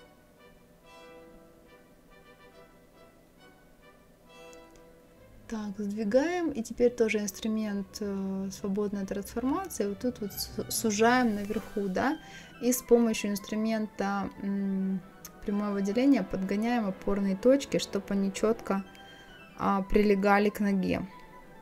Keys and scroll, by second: 16.7 Left.